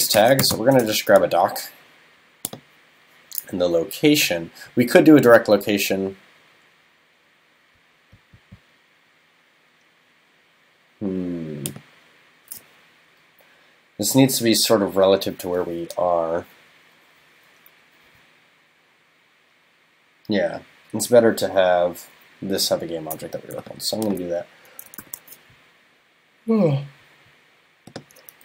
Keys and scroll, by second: 25.0 shift+super+n.